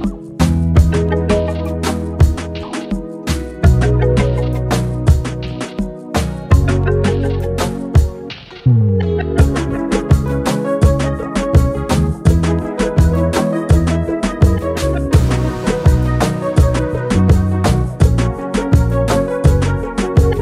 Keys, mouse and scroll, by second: 1.4-2.3 typing, 4.0-5.2 typing, 8.7 g, 12.4 space, 12.8 click, 13.1 ctrl+space, 13.2-13.8 ctrl+click, 13.5 ctrl+space, 16.2 click, 16.9-17.3 space, 18.2 click, 18.3-19.2 space, 19.8 click.